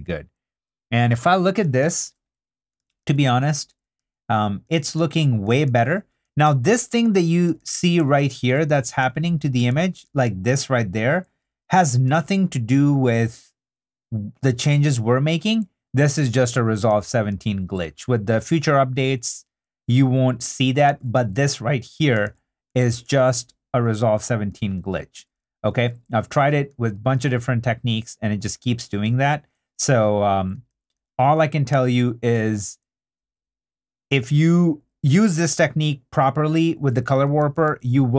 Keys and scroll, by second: 6.2 super+2, 7.4 super+2, 7.9 super+d, 8.6 super+2, 9.5 super+2, 9.7 super+d, 12.1 super+d, 17.0 super+d, 20.6 super+d, 20.9 super+d, 21.2 super+2, 22.1 super+2, 22.2 super+d, 23.0 super+d, 24.7 super+d, 25.4 super+3, 26.3 3, 26.7 super+d, 30.7 super+d, 37.4 super+d.